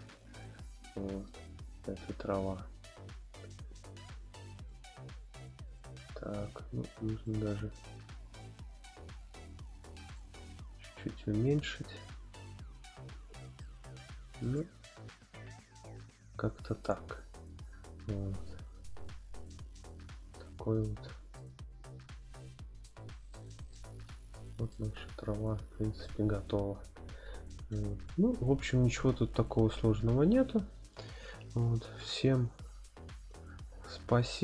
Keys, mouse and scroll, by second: 4.6 click, 5.7 click, 7.3-10.2 drag, 13.6-14.4 middle drag, 15.1 scroll up 1, 20.8 scroll down 1, 21.4-22.8 middle drag, 21.4 scroll down 1, 23.3-23.7 shift+middle drag, 24.0-24.4 scroll up 3, 24.7-26.1 middle drag, 26.3 scroll up 2, 26.4 middle click.